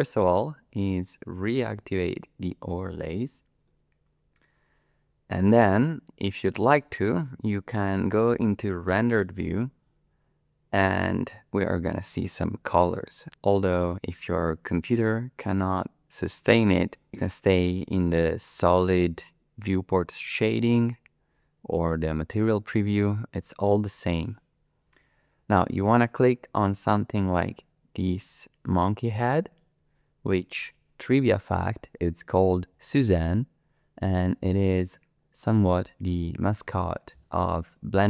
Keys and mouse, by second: 2.7 click, 9.5-11.1 drag, 28.0 click, 36.0-37.1 middle drag.